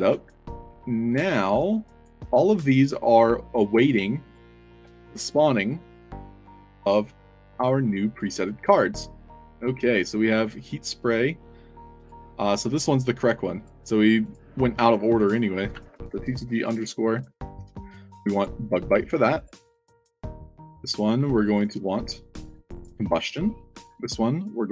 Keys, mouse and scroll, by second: 0.6 d, 1.8 click, 2.1 f, 2.6 scroll up 2, 4.1 click, 4.7 f, 5.2-5.6 alt+drag, 6.7 space, 6.8 w, 7.5 click, 9.5 drag, 11.9 click, 13.5 click, 14.1 click, 15.1 click, 16.0 c, 17.2 ctrl+a, 17.5 ctrl+c, 18.3 click, 19.3 click, 20.2 click, 21.0 click, 21.3 click, 21.6 ctrl+v, 22.7 click, 23.3 click, 24.6 click.